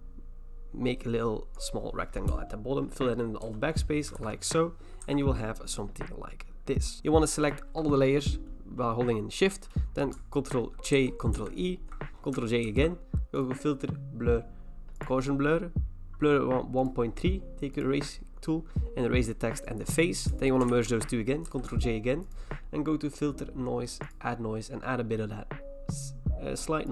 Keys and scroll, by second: 3.4 alt+BackSpace, 4.2 ctrl+d, 5.0 v, 10.9 ctrl+j, 11.3 ctrl+e, 12.6 ctrl+j, 20.7 ctrl+e, 21.5 ctrl+j.